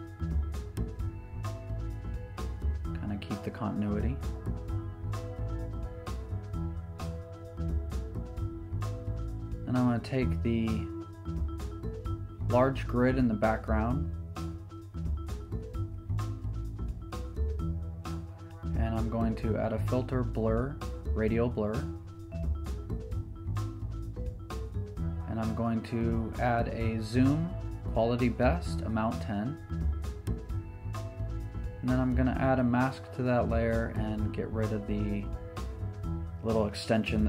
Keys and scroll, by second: 3.2 super+j, 10.2 z, 17.6 Right, 18.9 Return, 32.3 b.